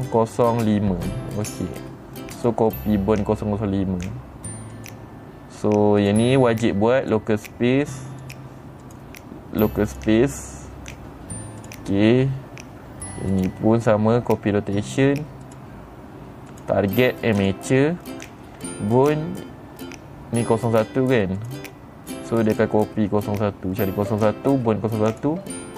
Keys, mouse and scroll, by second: 2.0 click, 2.9 click, 5.3 click, 6.5 click, 7.5 click, 8.7 click, 9.4 click, 10.4 click, 12.1 click, 13.8 click, 16.0 click, 17.0 click, 17.9 click, 19.5 click, 21.9 click, 23.0 click, 25.6 click.